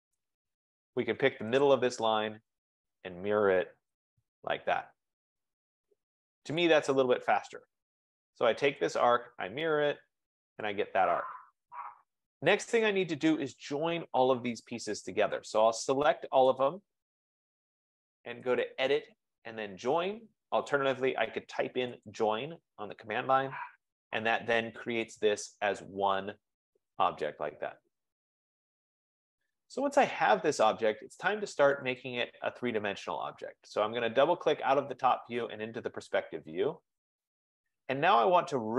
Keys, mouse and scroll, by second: 0.0-0.4 typing, 1.8 click, 2.6-3.3 typing, 2.8 click, 3.9 Return, 6.8 click, 7.7 click, 8.9 click, 10.8 click, 11.8 click, 16.5 click, 18.9 click, 22.2 click, 25.3 click, 26.2 click, 31.8 click, 32.6 click, 32.7 F15, 33.9 click, 34.2 click, 37.2 right click, 37.7-38.1 scroll.